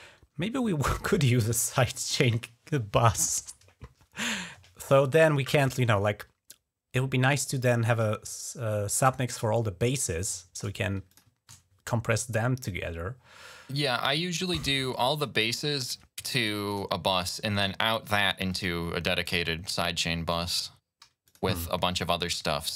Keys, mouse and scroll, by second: 10.8 click, 11.1 ctrl+click, 11.3 ctrl+s, 14.9 click, 16.5 click, 17.3 right click, 18.2 click, 18.5 click, 19.0 click, 20.2 right click, 21.0 click.